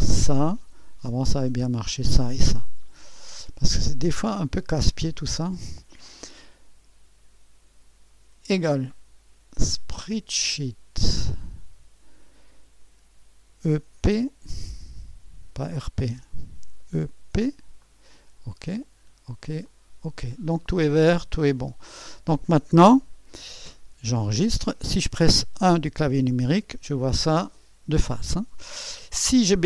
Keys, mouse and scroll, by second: 0.2 click, 1.7 click, 3.9-4.9 drag, 8.4 Menu, 8.6 =, 10.0 s, 11.4-12.5 drag, 13.5 r, 14.1 p, 16.0-17.3 typing, 17.8-19.6 drag, 19.0-19.7 typing, 19.7 click, 21.5 click, 21.6-23.0 typing, 22.2 click, 24.3 ctrl+s, 24.5-26.5 typing, 26.7-29.6 scroll up 1.